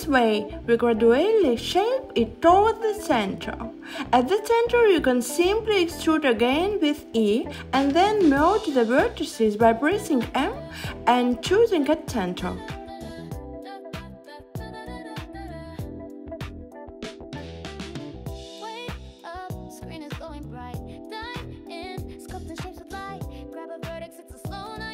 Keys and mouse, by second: 0.8 h, 2.8 alt+shift+click, 5.4 click, 8.5 x, 8.6 e, 10.2 m, 14.7 click, 17.0 click.